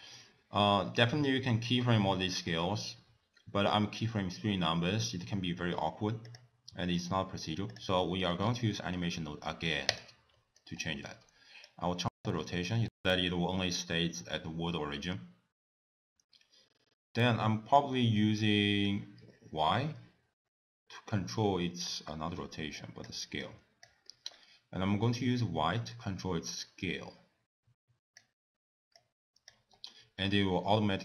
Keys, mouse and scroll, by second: 6.3 click, 7.0 shift+d, 8.0 middle click, 8.4-8.7 scroll up 4, 8.7 middle click, 9.9 click, 10.4 middle click, 10.8 scroll down 1, 11.7 click, 12.4 middle click, 12.7 scroll up 3, 13.2 middle click, 13.9 click, 14.5 middle click, 14.9-15.2 scroll down 3, 15.2 middle click, 15.6-16.3 scroll down 2, 17.7 click, 18.9 click, 22.1 middle click, 22.7 click, 23.4 click, 24.1 middle click, 25.1 click, 29.0 click, 29.7-30.2 scroll up 1, 30.2-31.0 scroll up 4, 30.3 middle click.